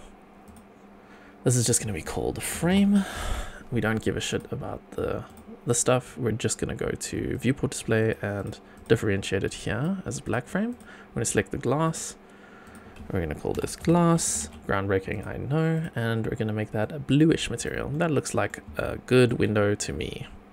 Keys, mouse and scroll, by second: 0.4 click, 1.6-4.3 shift+drag, 5.2 click, 7.3 click, 8.0 click, 8.7 click, 10.2 click, 10.7 click, 11.8 click, 12.6-15.1 drag, 14.4 s, 15.7 click, 17.6 click, 17.9-18.5 middle drag, 18.7-19.3 shift+middle drag, 19.5-20.5 scroll down 8.